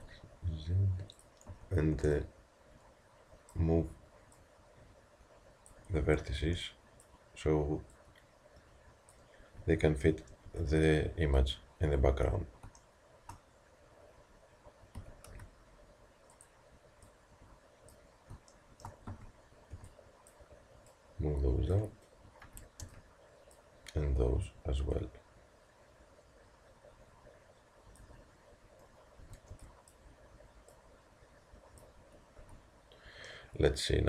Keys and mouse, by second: 1.5 a, 4.3-9.9 drag, 6.0 a, 9.4 a, 10.3 b, 13.0 middle click, 14.9 s, 17.0-18.6 drag, 18.6 middle click, 19.1 a, 21.7-22.8 drag, 22.4 a, 22.8 b, 24.9-28.0 drag, 29.2 a, 30.7-32.5 drag, 32.5 z.